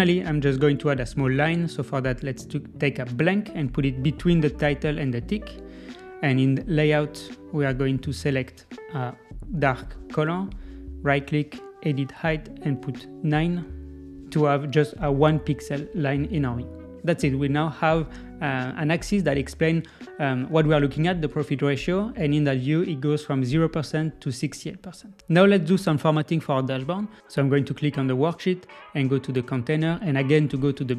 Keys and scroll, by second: 14.4 Return.